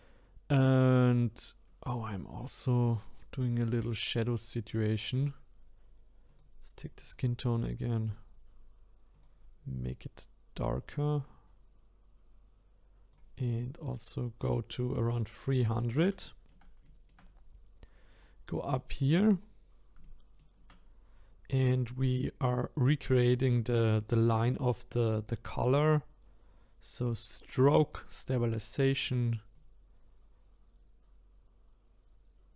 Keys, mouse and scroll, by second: 1.9 click, 6.3 click, 9.1 click, 13.9-15.8 drag, 15.8-16.2 scroll up 4, 16.2-17.3 shift+middle drag, 17.3-17.6 scroll up 5, 18.0-18.8 scroll down 2, 18.8 middle click, 19.4-20.0 scroll down 4, 20.0 shift+middle click, 20.8-23.2 scroll up 1, 23.2 middle click, 24.0-27.0 drag, 27.8 click, 29.5-32.5 drag.